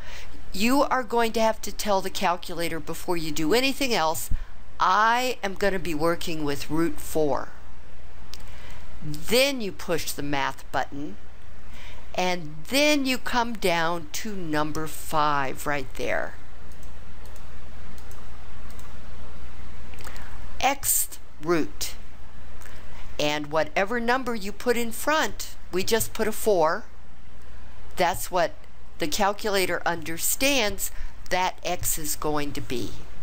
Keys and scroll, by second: 5.1 4, 16.7 Down, 17.2 Down, 17.9 Down, 18.6 Down.